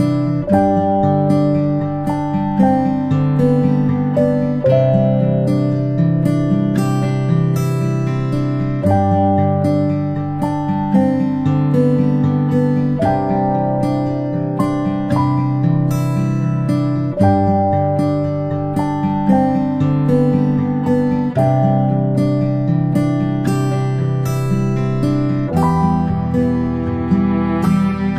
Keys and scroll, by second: 5.2-6.9 typing, 8.2-8.9 typing, 9.0 Return, 23.2-24.1 ctrl+space, 25.1 space, 25.4 space.